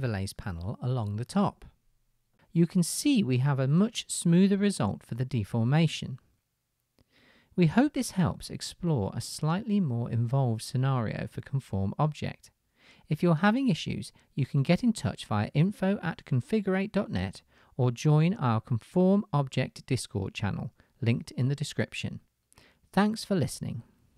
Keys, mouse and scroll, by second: 23.5 click, 23.5 right click, 23.6 middle click.